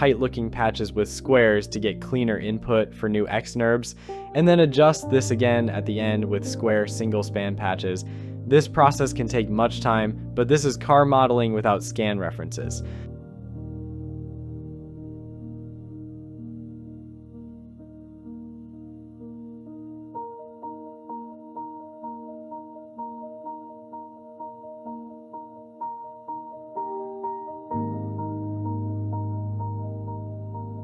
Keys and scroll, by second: 1.5 Return, 4.8 shift+w, 18.4 Return, 19.3 Delete, 26.6 shift+i, 27.0 Return, 27.7 Delete, 29.9 j.